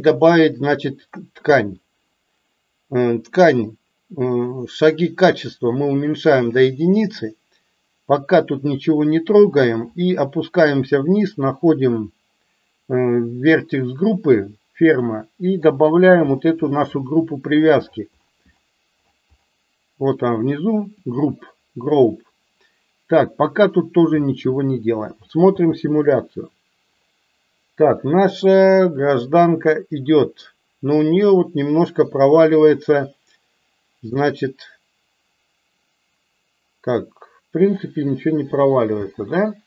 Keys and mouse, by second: 5.5 click, 14.9-21.2 drag, 25.5 space, 39.1 space.